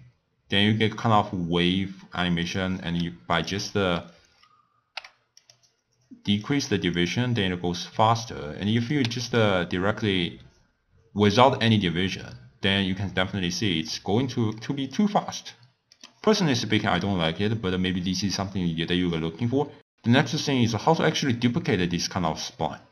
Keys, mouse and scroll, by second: 2.4 click, 3.3-5.5 drag, 6.4 click, 6.9-7.3 drag, 8.7 click, 11.6 click, 14.5 click, 16.5-19.5 middle drag, 19.7 click.